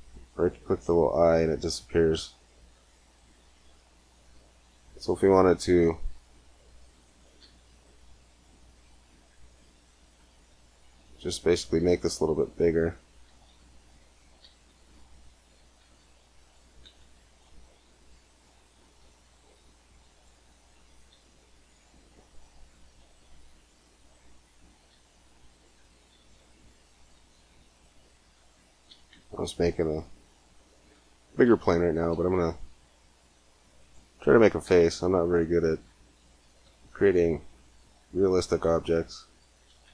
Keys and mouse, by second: 5.0 a, 5.5 c, 7.2 e, 11.6 e, 13.1 e, 14.2 e, 15.4 e, 16.4 e, 18.2 a, 19.6 c, 20.9 e, 24.7 e, 26.0 e, 27.0 e, 28.7 e, 32.1 a, 32.2 c, 34.5 e, 36.5 e.